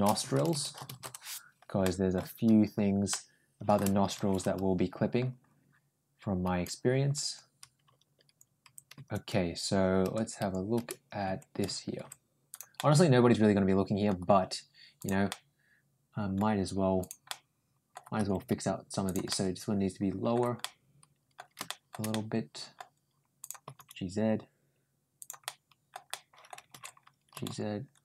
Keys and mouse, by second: 1.6 middle click, 2.0 Tab, 2.9 middle click, 12.6-13.9 middle drag, 14.8 click, 15.1-16.2 middle drag, 16.8 click, 17.1 middle click, 18.0 g, 19.1-20.1 middle drag, 20.4 middle click, 21.5 middle click, 21.9 middle click, 23.2 click, 23.5 g, 25.2 middle click, 25.9 middle click, 27.2 ctrl+g.